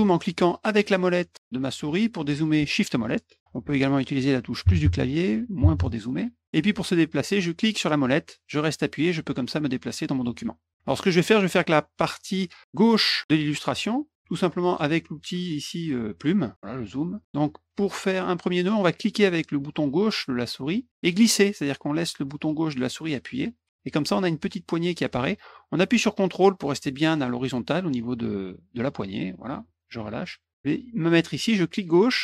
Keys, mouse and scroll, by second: 0.7 middle click, 1.2 middle click, 1.7 middle click, 2.7 shift+middle click, 2.7 shift+scroll, 3.3 shift+middle click, 3.3 shift+scroll, 7.5-10.7 middle drag, 16.3 click, 16.5 middle click, 16.9 middle click, 20.7-29.5 drag, 31.7-32.2 drag.